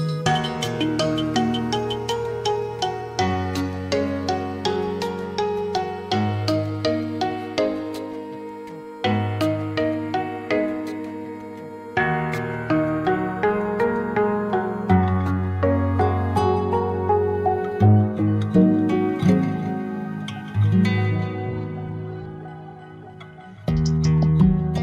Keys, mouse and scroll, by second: 3.6 click, 4.6 click, 6.9-9.4 drag, 17.7-22.4 drag, 22.7 middle click, 23.2-24.2 scroll down 8, 24.2-24.8 middle drag.